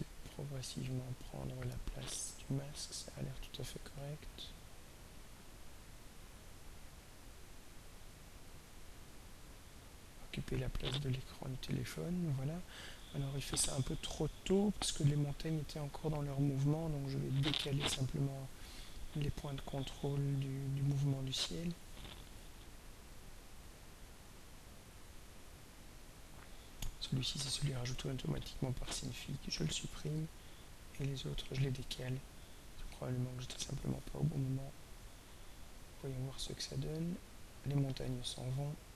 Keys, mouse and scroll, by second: 19.0 click, 22.4-26.2 drag, 27.5 right click, 29.0 click, 30.4-31.5 drag, 32.4-33.7 drag, 34.9-38.9 drag.